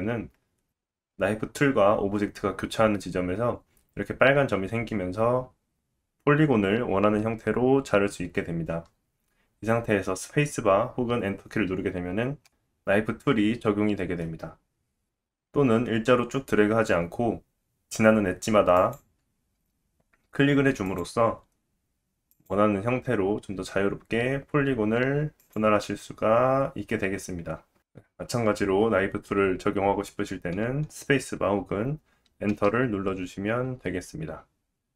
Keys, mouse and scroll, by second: 13.6 middle click.